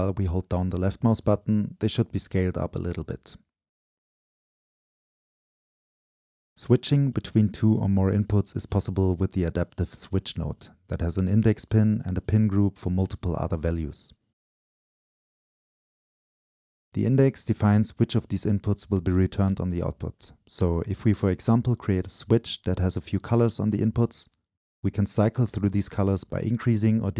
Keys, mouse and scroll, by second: 0.0-5.2 drag, 6.2-8.0 drag, 8.6 click, 10.2 click, 10.2-10.6 scroll up 2, 12.4-12.9 drag, 12.4-12.9 scroll up 2, 13.4-18.0 drag, 18.2 Return, 19.8-20.2 drag, 20.2-20.8 middle drag, 20.2-20.8 scroll down 2, 20.8-27.1 right drag.